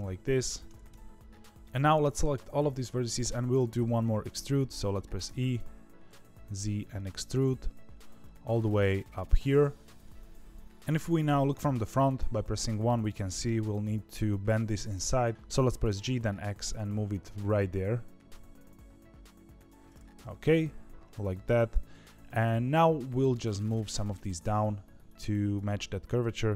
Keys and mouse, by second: 0.8 KP_1, 1.5 KP_3, 1.7-5.2 drag, 5.2 e, 11.5 KP_1, 12.5 shift+middle click, 15.3 g, 15.8 g, 20.1 KP_3.